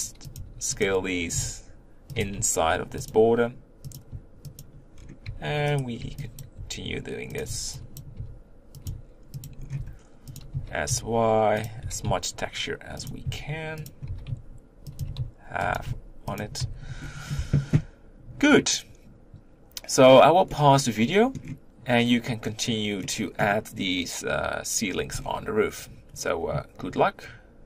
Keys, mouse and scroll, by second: 0.0-2.2 typing, 3.9 click, 4.6 shift+click, 6.4 b, 6.5 g, 7.4 b, 8.8 g, 9.8 r, 10.5 s, 11.8 g, 13.2 s, 14.1 g, 15.0 s, 15.7 g, 16.6 Tab, 16.9-20.5 scroll down 3, 20.5-22.0 middle drag, 22.0-23.0 scroll up 3, 23.0-25.2 middle drag, 25.2-27.6 scroll down 4.